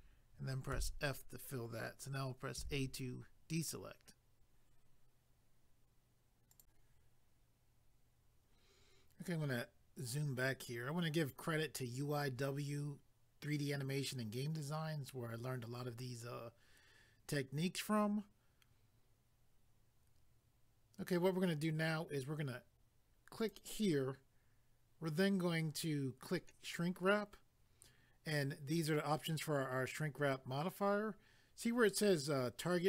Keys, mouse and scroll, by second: 6.5 click, 9.2 scroll down 1, 23.4 click, 26.7 click.